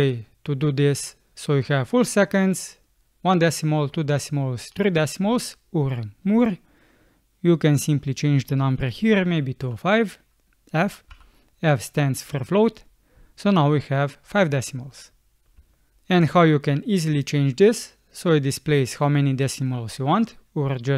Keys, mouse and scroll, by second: 9.6 5, 11.1 f, 15.6 space.